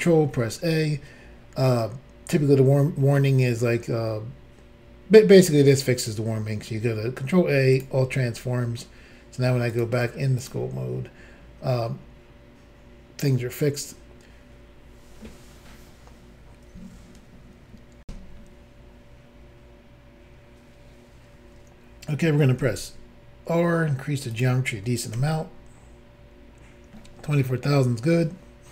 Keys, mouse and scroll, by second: 0.3 ctrl+a, 7.8 click, 9.7 click, 10.4 click, 14.0-15.3 scroll up 1, 18.0 Insert, 22.6 r, 24.3 click, 24.4 click, 25.2 ctrl+r, 27.4-28.7 scroll up 1.